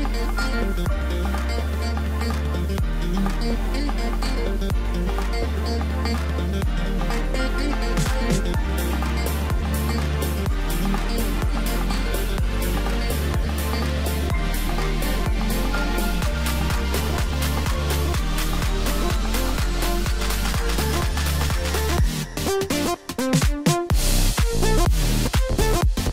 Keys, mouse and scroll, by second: 6.4-7.3 scroll up 1, 7.6 f, 8.8 scroll up 2, 9.2 scroll down 2, 10.2 ctrl+KP_6, 10.5 ctrl+KP_6, 11.6-12.7 scroll up 2, 12.8 a, 13.4-13.8 scroll up 2, 13.8 scroll down 2, 14.6 f, 24.7-25.6 scroll up 1.